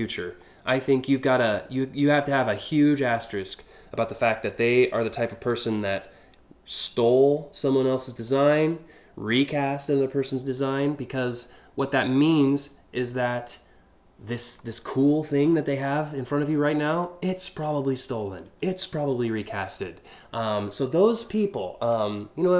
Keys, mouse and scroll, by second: 0.5 scroll down 1, 4.6-7.3 drag, 7.8-13.0 drag, 20.8 scroll up 1, 21.5 scroll up 2.